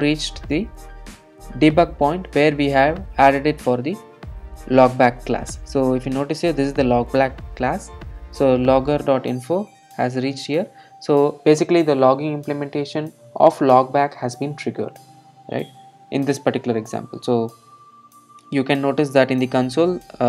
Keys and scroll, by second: 16.1 alt+super+r.